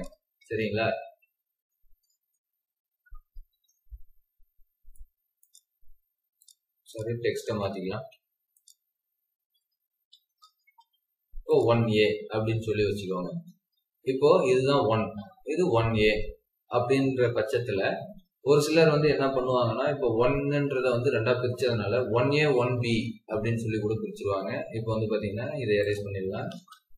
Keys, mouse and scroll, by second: 0.3 typing, 1.8-3.4 typing, 7.4-8.4 scroll up 1, 10.1-10.5 typing, 12.5-12.9 scroll down 1, 12.9-13.7 scroll up 1, 13.5-15.0 typing, 13.8-14.5 scroll up 1, 15.9 scroll down 1, 16.5-17.3 typing, 26.1-26.8 typing.